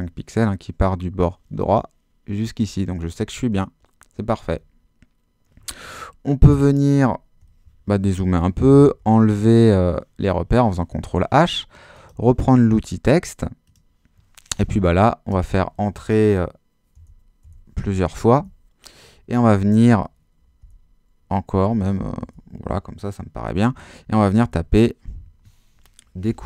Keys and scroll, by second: 6.9 super+-, 8.8 super+h, 15.3 Return, 16.9 Return, 20.6 Return, 22.2 BackSpace, 24.4-26.4 typing.